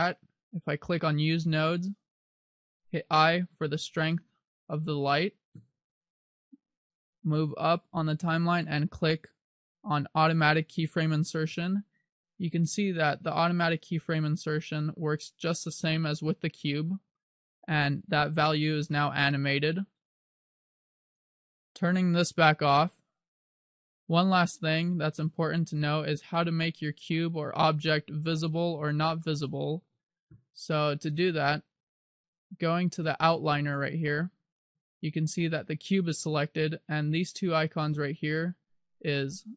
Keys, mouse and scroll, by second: 1.0 click, 6.7 click, 10.9 click, 13.5 click, 18.7 click, 24.1 click, 25.8 right click, 27.9 scroll down 1, 29.3 shift+middle click, 32.1 click.